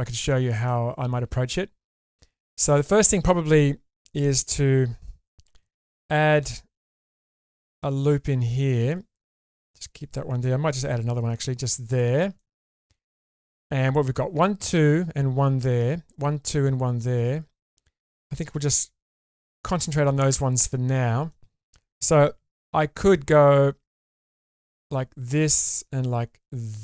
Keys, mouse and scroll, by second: 5.5 ctrl+r, 10.8 ctrl+r, 12.3-13.8 middle drag, 19.8 middle click, 20.5-20.9 scroll up 2, 20.9 middle click, 22.6 k.